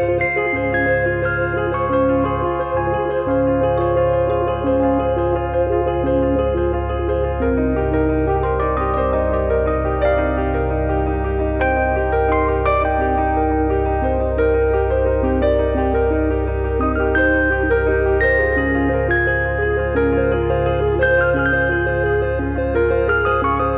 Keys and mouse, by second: 0.1 alt+z, 0.3 middle click, 0.5 middle click, 1.3 KP_3, 2.6 shift+middle click, 2.8 middle click, 3.6 KP_1, 4.5 shift+middle click, 4.8 middle click, 4.9 shift+middle click, 5.3 click, 7.8 middle click, 8.8 click, 10.3 click, 10.8 click, 11.6 click, 12.4 click, 13.9 middle click, 15.2 click, 15.8 click, 17.4 middle click, 17.7 middle click, 18.3 click, 19.6 click, 20.1 middle click, 20.5 middle click, 21.1 click, 22.1 click, 22.5 click, 23.0 middle click.